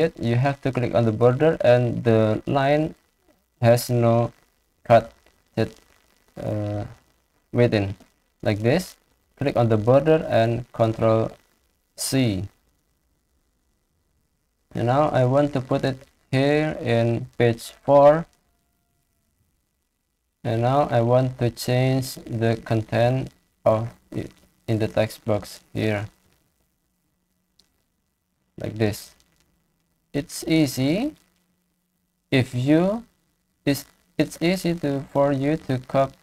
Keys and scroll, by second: 10.8 ctrl+c, 19.2 ctrl+v, 25.0 ctrl+shift+Down, 25.1 ctrl+shift+Left, 26.1 ctrl+c, 27.3 ctrl+a, 28.1 ctrl+v.